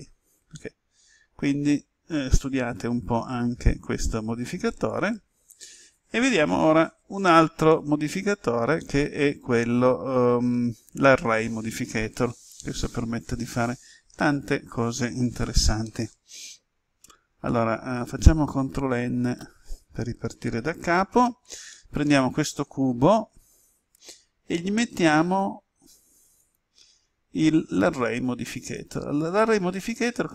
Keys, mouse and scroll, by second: 0.5-10.6 middle drag, 13.2 Escape, 15.9 middle click, 18.5 ctrl+n, 19.2 Return, 21.7-23.6 middle drag, 25.2 click.